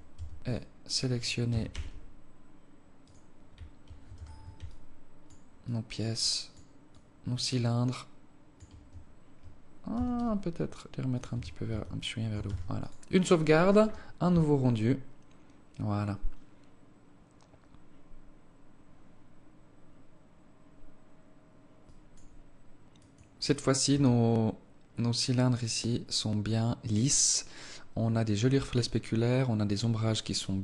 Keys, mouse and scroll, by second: 0.2 right click, 1.2 g, 3.9 z, 4.4 alt+click, 5.4 alt+click, 6.0 alt+click, 6.7 alt+click, 9.6 g, 11.0 Tab, 11.4 Tab, 12.2 ctrl+s.